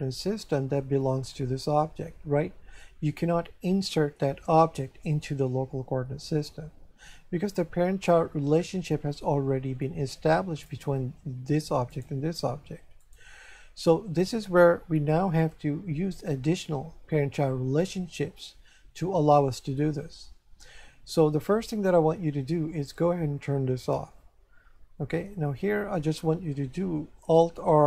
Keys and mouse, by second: 10.7 right click, 11.9 right click, 13.0 right click, 23.8 click, 25.5 shift+middle click.